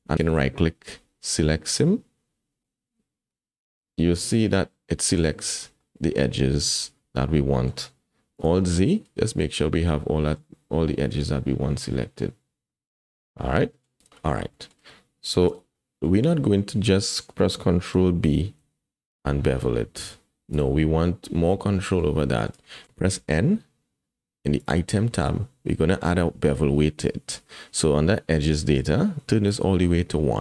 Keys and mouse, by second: 0.3-1.8 drag, 2.6-5.1 middle drag, 5.4 shift+middle click, 5.8-7.7 middle drag, 8.6 alt+z, 9.0-10.4 drag, 10.9-13.8 middle drag, 14.0 KP_1, 14.6 shift+middle click, 15.6 alt+z, 15.7 click, 17.9 ctrl+b, 21.2 click, 21.9 middle click, 22.3 shift+middle click, 22.7 middle click, 23.1 n, 29.5-30.4 drag.